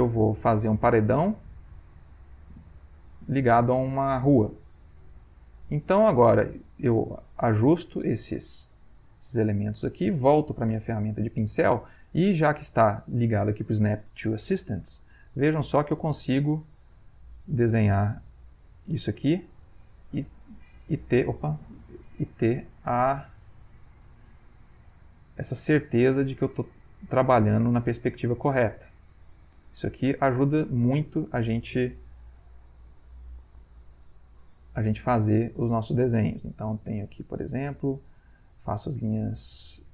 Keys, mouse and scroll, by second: 2.0-3.5 drag, 4.3-5.9 drag, 6.4-8.5 drag, 8.8 middle click, 9.6-11.3 scroll up 1, 10.7 b, 15.3-16.7 drag, 18.1-19.1 drag, 19.9-21.3 drag, 21.6 ctrl+z, 22.8-24.5 drag, 25.0-26.1 drag, 26.5 click, 27.8 click, 29.2 click, 30.5 click, 32.0 ctrl+z, 33.0 click, 35.2 click, 36.7-38.5 drag, 39.4 click.